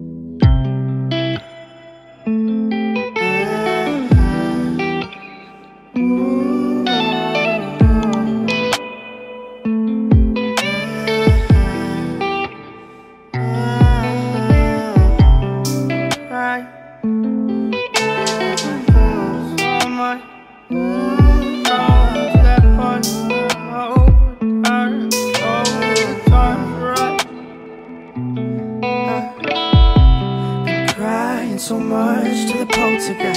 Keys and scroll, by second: 28.1 ctrl+space.